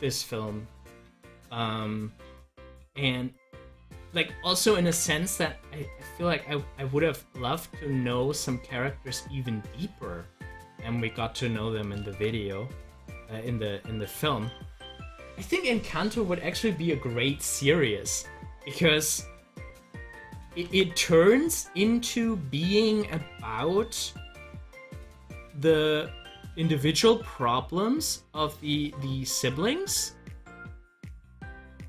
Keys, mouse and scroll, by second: 3.1-4.7 drag, 4.7 ctrl+z, 12.0 ctrl+z, 14.7 ctrl+z, 19.2-20.6 drag.